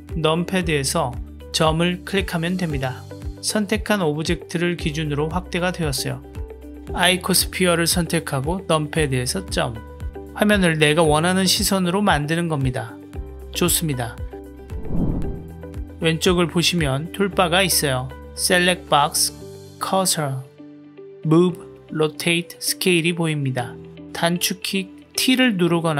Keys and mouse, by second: 2.0 KP_Decimal, 3.7 click, 5.0-6.0 middle drag, 7.2 click, 7.9 KP_Decimal, 9.7-12.4 middle drag, 13.0 KP_Decimal, 13.7-14.7 middle drag, 24.3 t, 25.8 t.